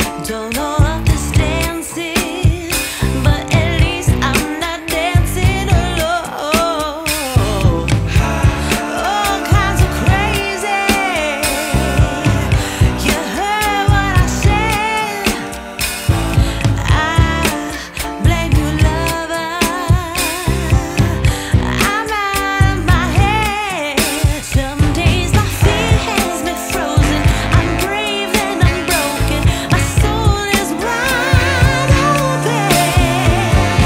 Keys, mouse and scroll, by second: 0.7 scroll down 1, 1.0-1.4 scroll up 1, 1.4 scroll down 1, 1.5 scroll up 1, 1.7-3.7 right drag, 3.8 scroll up 1, 4.0 right click, 4.6 scroll up 1, 5.4 ctrl+shift+click, 6.4 ctrl+r, 7.2 click, 7.8 ctrl+shift+click, 9.0 ctrl+r, 9.9 click, 10.9 ctrl+shift+click, 14.4 ctrl+shift+click, 16.4 ctrl+r, 17.2 click, 17.8 scroll down 1, 18.0 scroll up 1, 18.2 right click, 18.8 scroll up 1, 19.1 click, 20.0 ctrl+k, 21.2 click, 22.6 right click, 23.0 click, 23.3 right click, 23.9 click, 24.9 right click, 25.3 Tab, 26.0 scroll down 1, 26.3 right click, 26.9-27.3 scroll up 1, 27.3 scroll down 1, 27.5-27.9 scroll up 1, 27.9 click, 28.1 right click, 28.6 click, 29.4 right click, 29.7 click, 29.9 right click, 30.5 click, 31.8 right click, 32.0 scroll down 1, 32.3 right click, 32.8-33.5 scroll up 1, 33.5 click, 33.7 right click.